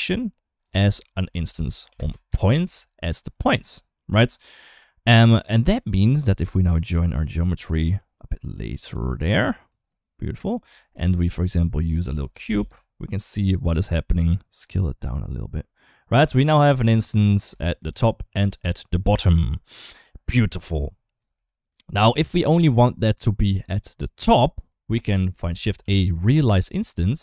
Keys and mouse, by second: 0.0-3.0 drag, 4.0 click, 5.3 middle click, 5.9 click, 7.9 click, 9.5 click, 10.7 shift+middle click, 11.4-13.4 drag, 14.4-16.6 shift+drag, 17.4 shift+middle click, 20.7 click, 21.4 shift+middle click, 21.9 click, 24.3 middle click, 25.1 shift+a.